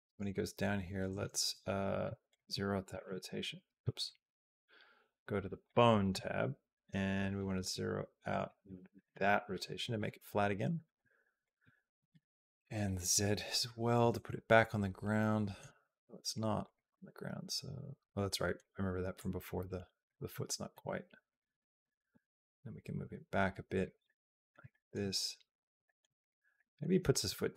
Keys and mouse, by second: 2.1-3.6 drag, 4.1 ctrl+z, 8.2-9.2 drag, 11.3-12.3 drag, 14.0-15.5 middle drag, 15.5 g, 16.8-18.4 middle drag, 18.9 click, 20.3 shift+middle click, 21.1 click, 22.1 g, 23.9 middle click, 24.5 shift+middle click, 25.7 shift+middle click, 26.5 click, 26.9 g.